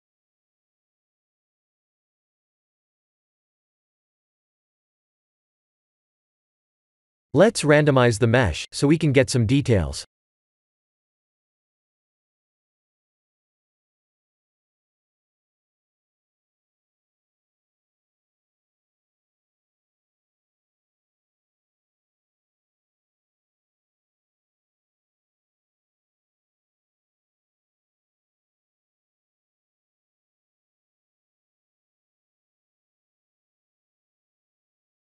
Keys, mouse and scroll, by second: 2.4 middle click, 5.8 click, 8.5-8.9 scroll up 3, 10.0-10.3 scroll up 3, 10.7 middle click, 13.1 click, 18.1 middle click, 19.5 middle click, 21.3 c, 26.5 click, 30.3 click.